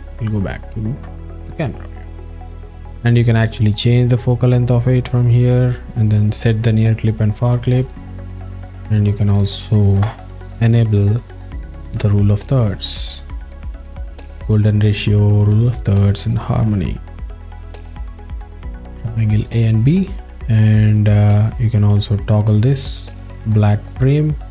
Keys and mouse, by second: 1.0 KP_0, 2.9 alt+middle click, 4.0-5.1 drag, 7.9 alt+shift+middle click, 8.5 ctrl+alt+middle click, 8.9-9.3 alt+middle drag, 9.9 KP_0, 16.8 alt+middle click.